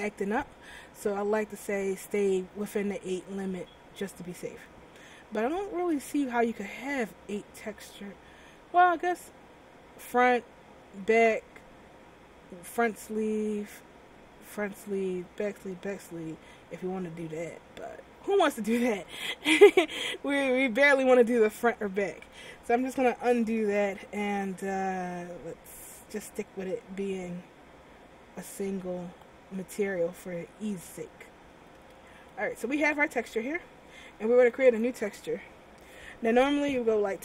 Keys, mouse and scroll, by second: 3.9-4.4 scroll down 3, 4.4 middle click, 5.0-6.0 scroll up 5, 6.0-6.3 scroll down 1, 8.3-8.7 scroll down 2, 16.8 scroll down 1, 17.5 middle click, 18.2 scroll up 4, 18.6-19.3 scroll down 2, 19.3 middle click, 21.5 middle click, 25.0 ctrl+alt+z, 29.7 middle click, 30.3 middle click, 31.0 middle click, 32.1 shift+middle click, 34.8 click.